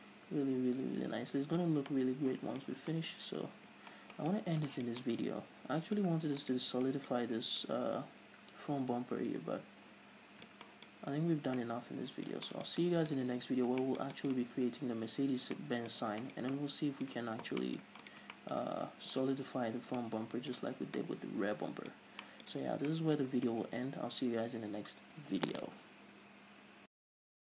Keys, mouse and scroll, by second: 0.5-1.6 scroll up 1, 1.6-2.5 scroll up 1, 2.5-3.3 scroll up 1, 3.3 scroll down 1, 4.3 ctrl+s, 4.9 scroll up 1, 7.0 right click, 7.4-18.6 middle drag, 11.6 scroll up 2, 11.8 a, 14.0 ctrl+s, 18.6 right click, 18.9-27.5 middle drag, 21.3-21.6 scroll down 2, 22.5 scroll up 2, 23.1 a, 24.3 ctrl+s.